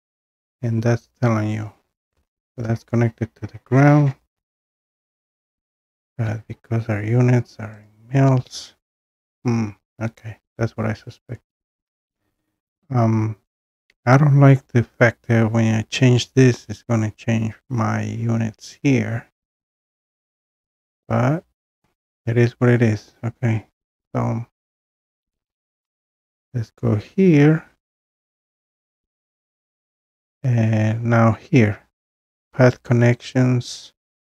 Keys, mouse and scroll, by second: 4.9 click, 5.9 click, 7.9 click, 26.0 click, 26.1 click, 31.2 click.